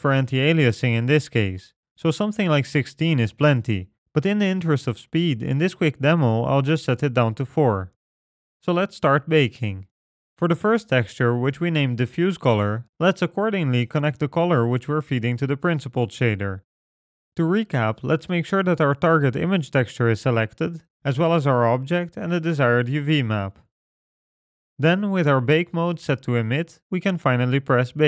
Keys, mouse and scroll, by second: 5.5 click, 9.2-10.7 scroll down 11, 10.7 middle click, 11.0-11.8 scroll down 3, 11.3-11.8 scroll up 1, 13.5 click, 18.9 middle click, 19.7-20.8 scroll up 7, 20.8 click, 21.8 click, 22.9 click, 24.0 click, 24.9 click, 25.8-28.0 scroll down 7.